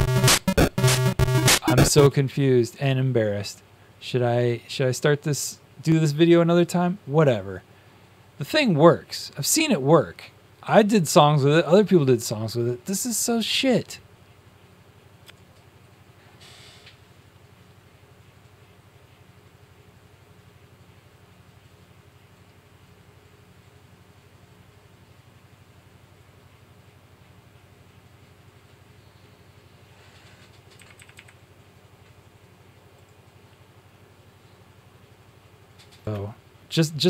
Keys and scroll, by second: 1.8 space, 15.1 space, 30.9 Up, 31.0 Up.